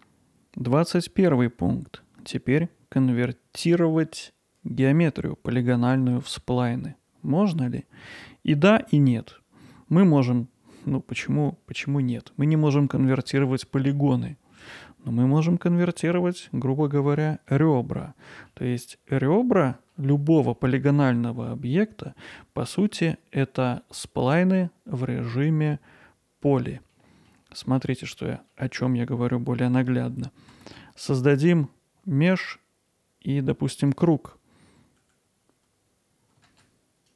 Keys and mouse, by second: 17.5 middle click, 27.1 middle click, 27.8-28.1 middle drag, 28.5-30.1 middle drag, 30.5 shift+a, 36.5 shift+z.